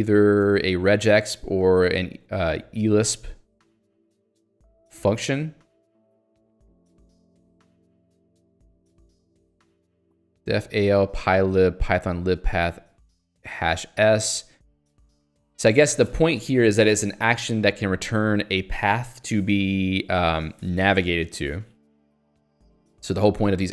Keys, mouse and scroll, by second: 0.3 click, 0.5 Escape, 3.0-5.4 scroll down 3, 5.4-7.2 scroll down 3, 7.2 scroll up 2, 7.9 scroll up 1, 22.1 scroll down 1, 22.5 scroll up 1.